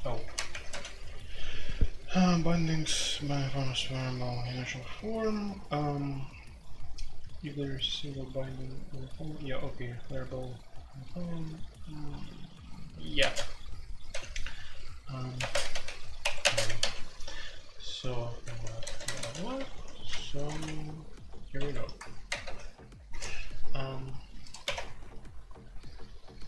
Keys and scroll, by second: 0.2 ctrl+g, 0.2-1.0 typing, 2.4-6.7 typing, 8.7 j, 8.7 k, 13.2-14.1 typing, 15.3-16.9 typing, 18.3-20.5 typing, 18.4 Tab, 21.5-22.9 typing, 24.4-25.1 typing.